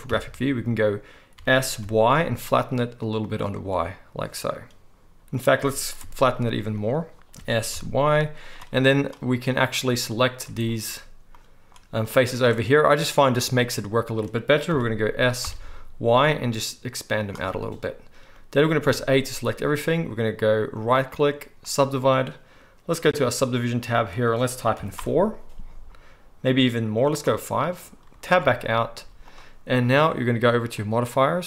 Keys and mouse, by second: 0.0 KP_3, 1.3 s, 6.8-10.3 right drag, 7.3 s, 9.4 click, 9.4-17.3 middle drag, 14.7 s, 17.3-23.1 right drag, 18.8 a, 23.2-26.2 middle drag, 23.3-25.8 drag, 23.3-25.8 right drag, 26.2-27.7 drag, 27.7-30.8 middle drag, 28.3 Tab, 29.0 z, 30.8-31.4 drag.